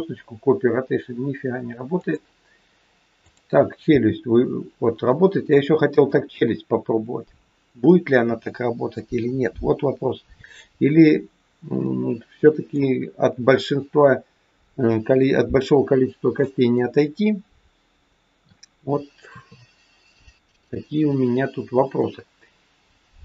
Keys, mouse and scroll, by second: 3.2 click, 3.8 r, 11.8 middle click, 16.5 middle click, 19.2 KP_3, 21.3-22.3 scroll down 2.